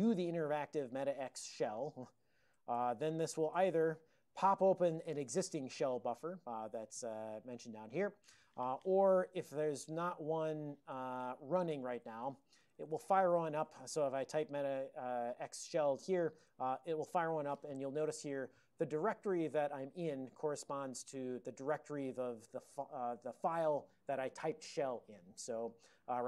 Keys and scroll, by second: 0.6 alt+x, 1.0-3.7 typing, 8.8 ctrl+x, 11.8-13.3 typing.